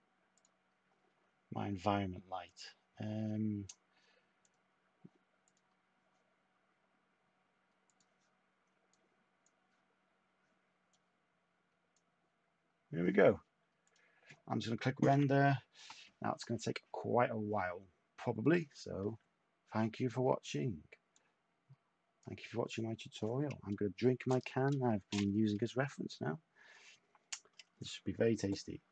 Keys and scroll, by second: 15.1 F9.